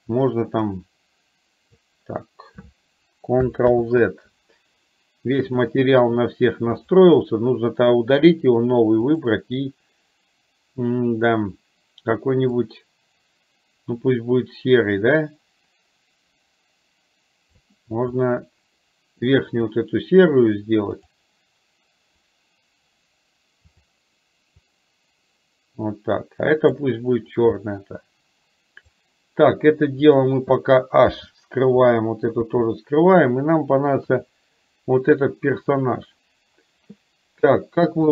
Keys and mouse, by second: 3.8 ctrl+z, 5.5 click, 6.8 click, 9.0 click, 19.4 click, 20.9 click, 27.7-28.9 middle drag, 30.2 click, 34.0 KP_3.